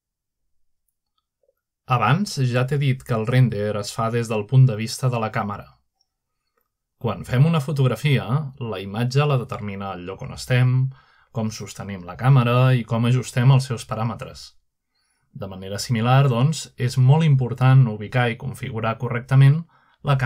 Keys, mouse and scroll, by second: 1.7-4.2 middle drag, 5.4 click, 8.9 middle click, 9.7 middle click, 10.4 0, 11.5-12.2 scroll down 1, 12.2 scroll up 1, 12.5 scroll down 1, 13.2-14.1 scroll up 2, 13.7 middle click, 14.3-15.0 middle drag, 14.5-15.7 scroll down 1, 16.7-17.5 middle drag, 17.9-20.2 shift+middle drag.